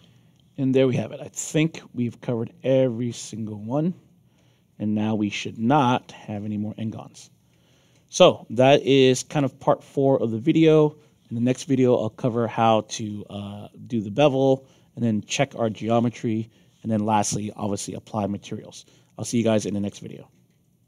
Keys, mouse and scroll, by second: 5.7 scroll down 2, 6.3 middle click, 6.8-12.7 alt+drag, 13.0 middle click, 13.6 alt+click, 17.9 alt+click.